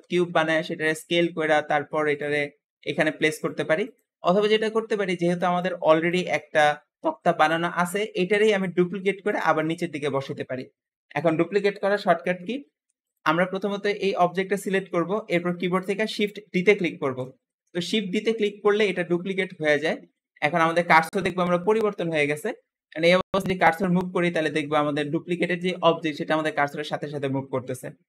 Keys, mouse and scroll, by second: 0.5 s, 2.6 s, 3.6 x, 4.1 scroll up 2, 12.9 click, 16.9 shift+d.